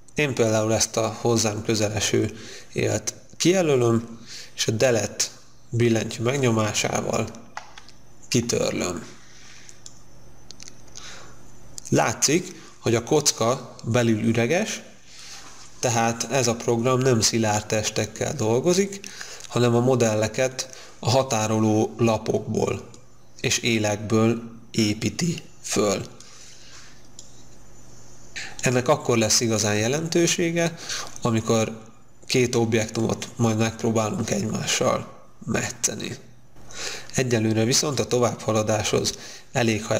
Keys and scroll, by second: 6.9 Delete.